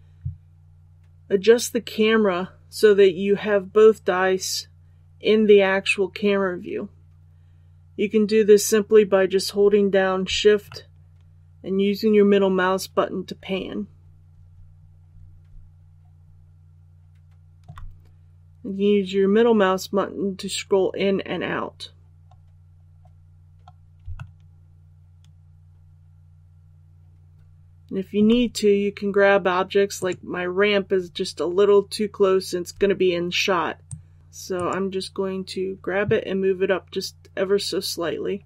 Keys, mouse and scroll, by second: 10.6-17.6 shift+middle drag, 19.6-20.5 scroll down 1, 24.1-28.1 shift+middle drag, 29.9 right click, 33.8 click, 34.5 right click, 37.9 scroll down 1.